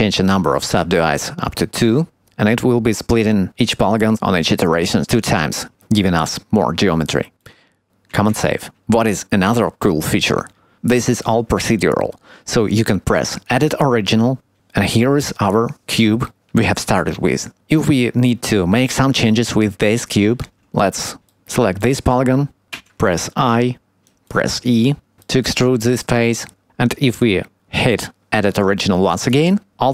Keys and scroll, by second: 8.0 ctrl+s, 24.7 e.